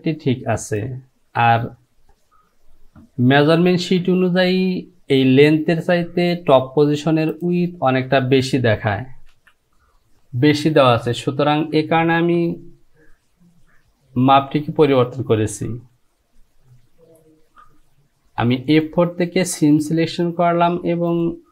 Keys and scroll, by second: 9.4 j.